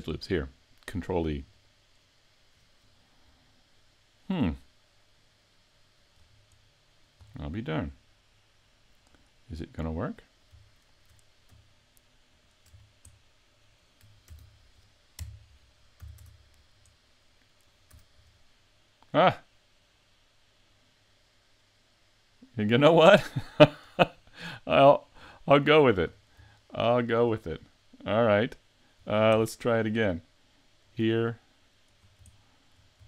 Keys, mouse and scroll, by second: 3.2 middle click, 6.2 scroll up 5, 6.7 middle click, 7.3-7.9 scroll down 1, 7.9 middle click, 9.1 right click, 9.7 middle click, 10.7 shift+middle click, 12.4 shift+right click, 12.8 scroll down 3, 13.2 middle click, 14.3 ctrl+e, 16.0 a, 16.2 Tab, 16.6 scroll down 4, 17.0 middle click, 17.9 a, 18.3 middle click, 24.0-24.7 scroll up 5, 24.5 middle click, 25.4 shift+middle click, 26.1-26.5 scroll down 1, 26.5 shift+middle click, 28.6 shift+middle click, 29.3 Tab, 30.9 right click, 32.0 scroll up 4, 32.3 shift+middle click.